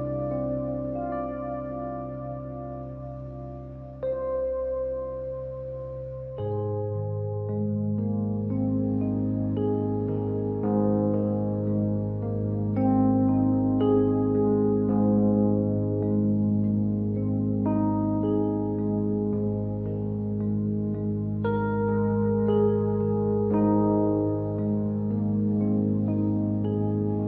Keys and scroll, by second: 4.6 ctrl+y, 20.3 Return, 24.5 ctrl+c, 25.0 ctrl+f, 27.0 Return, 27.0 ctrl+z.